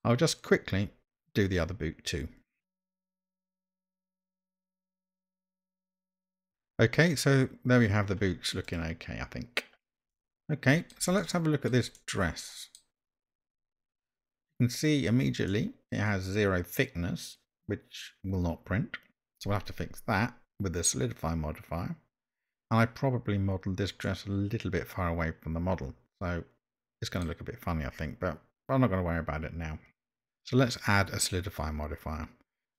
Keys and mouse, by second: 2.8 click, 3.6 Tab, 3.9 alt+a, 4.0 middle click, 4.3 alt+click, 4.7 alt+click, 5.0 e, 5.1 m, 5.5 Tab, 6.0 click, 6.2 middle click, 6.2 Tab, 6.3 middle click, 6.4 Tab, 8.6 click, 10.2-10.9 shift+middle drag, 11.2-11.7 shift+middle drag, 12.0-12.8 middle drag, 15.5-15.9 middle drag, 24.1-27.2 middle drag.